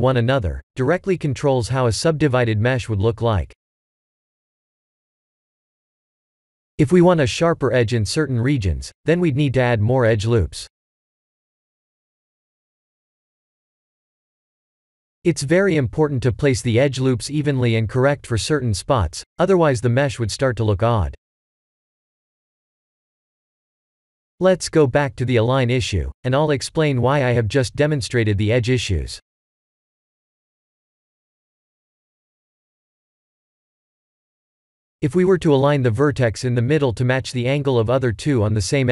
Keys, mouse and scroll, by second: 0.5 3, 0.7 click, 1.7 l, 5.1 i, 5.9 e, 9.6 Tab, 9.9 middle click, 13.3 middle click, 13.7 click, 14.3 Tab, 15.3-15.7 scroll up 1, 15.7 middle click, 16.7 middle click, 17.5 Tab, 18.2 x, 20.5 click, 21.5 KP_1, 21.9 KP_7, 22.9 shift+middle click, 23.0 shift+middle click, 23.9 shift+a, 27.2 Tab, 28.1 ctrl+r, 29.2 click, 29.7 1, 30.0 click, 30.3 b, 31.4 g, 33.0 click, 33.3 b, 34.0 g, 35.0 click, 36.1 b, 37.6 shift+middle click, 38.5-38.9 scroll up 1.